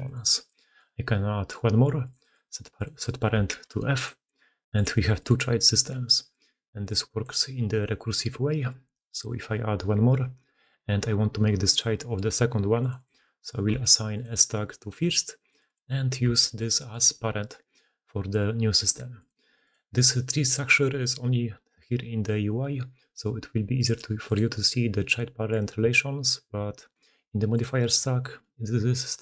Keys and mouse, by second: 0.9-2.7 middle drag, 3.9-4.7 middle drag, 7.1-8.6 middle drag, 9.4-11.6 middle drag, 13.2-13.8 shift+drag, 14.1-15.4 middle drag, 16.1 shift+click, 16.9-23.8 middle drag, 27.6-29.2 middle drag.